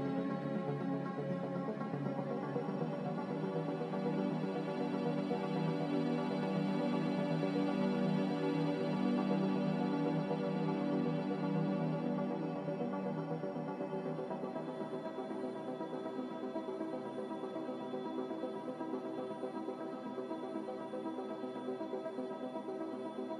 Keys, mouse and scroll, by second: 0.0 6, 0.8 BackSpace, 1.0 BackSpace, 8.7 ctrl+z, 10.7 ctrl+z, 14.8 typing, 15.2 Return.